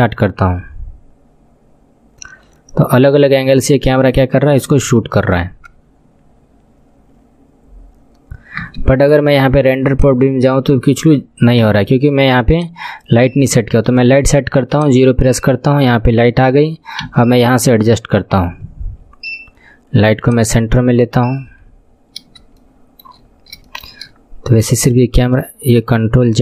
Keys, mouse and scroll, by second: 8.7 space, 9.3-10.1 scroll down 10, 10.1 click, 11.7 KP_1, 12.6-13.8 drag, 13.8 shift+a, 17.1 KP_7, 20.3-21.7 drag, 21.7-22.1 scroll up 9, 22.1 scroll down 1, 22.7 shift+middle click, 23.4-23.9 scroll up 3, 23.7-26.4 shift+middle drag, 24.7 Left.